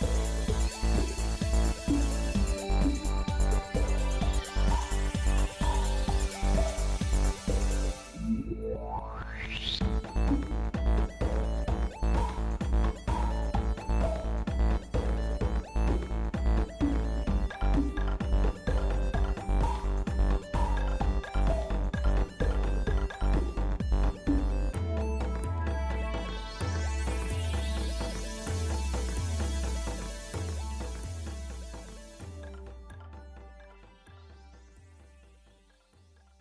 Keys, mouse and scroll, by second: 2.9 ctrl+Tab, 4.1 click, 5.9 ctrl+KP_Add, 8.8 alt+n.